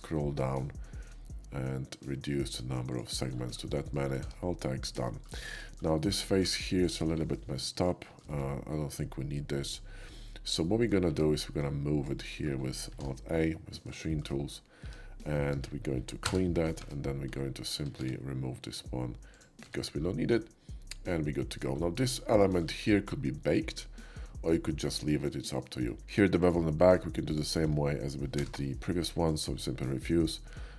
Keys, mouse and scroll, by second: 0.1 middle click, 0.9 middle click, 1.5 middle click, 2.9 click, 3.1 middle click, 3.7 middle click, 4.2 alt+x, 5.0 shift+middle click, 5.4 shift+middle click, 6.0 shift+middle click, 6.4 Tab, 6.8 click, 7.3 middle click, 8.0 shift+middle click, 10.6 shift+middle click, 11.7 shift+Tab, 12.0 shift+click, 12.3 shift+middle click, 13.5 alt+a, 13.5 alt+middle click, 14.1 shift+middle click, 14.8 Tab, 15.4 Tab, 16.2 3, 16.8 Tab, 18.0 q, 19.6 Tab, 20.3-21.6 middle drag, 21.8 shift+middle click, 22.1 shift+middle click, 24.2 shift+middle click, 25.3 shift+middle click, 25.9 shift+middle click, 26.4 click, 26.8 middle click, 27.3-28.3 ctrl+drag, 28.3 y, 29.3 click, 29.8 middle click, 30.5 middle click.